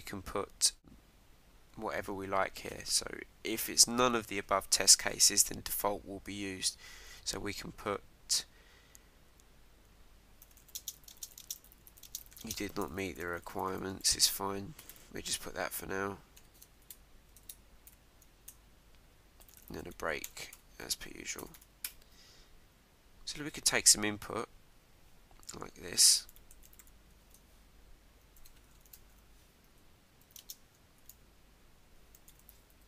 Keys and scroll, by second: 15.6 Left, 16.8 ctrl+Right, 18.5 Return, 21.0 Down, 22.1 Up, 23.1 Up, 24.2 Return, 27.2 shift+(, 28.4 shift+", 28.9 shift+%, 29.6 Right, 32.7 Right.